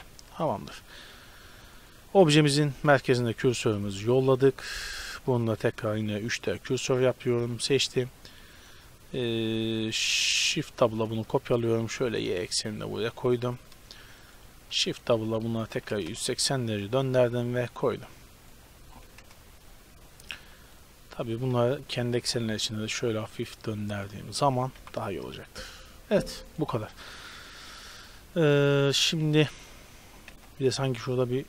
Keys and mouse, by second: 0.0 z, 1.8-2.8 right drag, 2.8 shift+s, 6.9-7.5 right drag, 7.9 r, 8.6-10.9 right drag, 10.9 shift+d, 13.6 drag, 14.3-15.9 drag, 14.5 shift+d, 15.3 r, 16.7-17.1 drag, 17.1 z, 19.1 KP_0, 20.7-21.8 drag, 21.8 r, 24.8 a, 26.5-28.1 right drag, 28.4-31.4 middle drag, 30.3 KP_Decimal.